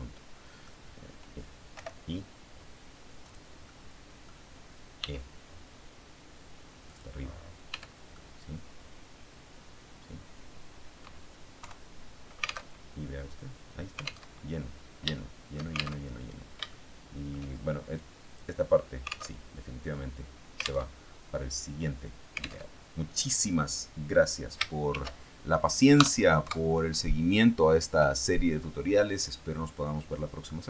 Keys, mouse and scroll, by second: 1.6 i, 3.2 click, 3.6 middle click, 4.9 e, 6.8 click, 7.0-7.5 scroll down 2, 7.6 Tab, 8.0-11.1 drag, 11.1-11.5 scroll up 1, 11.5 KP_3, 12.6 alt+Tab, 14.2 alt+Tab, 15.0 shift+middle click, 15.9 alt+shift+Tab, 16.6 shift+middle click, 17.1 shift+click, 17.8 click, 19.2 alt+Tab, 20.8 alt+Tab, 22.6 alt+Tab, 24.8 ctrl+shift+s, 25.8 KP_Add, 26.3 KP_Enter.